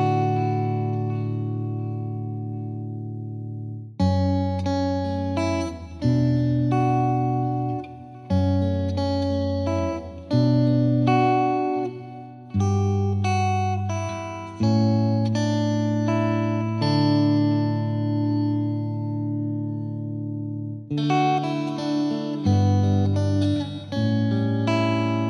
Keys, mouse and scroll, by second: 0.1-0.7 scroll up 10, 1.0 z, 2.3-2.8 middle drag, 2.8-3.2 scroll up 2, 3.4-4.6 scroll down 3, 3.6 z, 4.6-8.0 drag, 10.7 click, 11.4 r, 11.8 BackSpace, 20.2 scroll down 1, 20.4-20.8 scroll up 1, 20.8 z, 21.5 scroll up 1, 21.7-22.4 middle drag, 22.4-23.2 scroll down 1, 23.2 scroll down 1, 23.3 scroll up 1, 23.5 click, 23.7 ctrl+s, 23.8 click, 24.1 scroll down 1, 24.2 middle click, 24.3 scroll up 2, 24.4 ctrl+s, 24.5 click, 24.9 click, 25.1 scroll down 3.